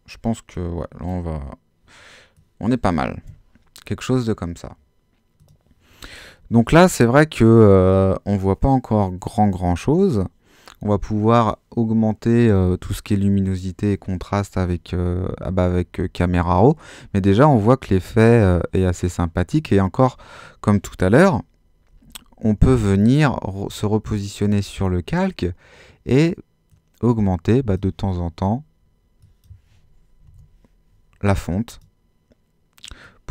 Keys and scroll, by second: 22.0 super++, 29.9-30.7 typing.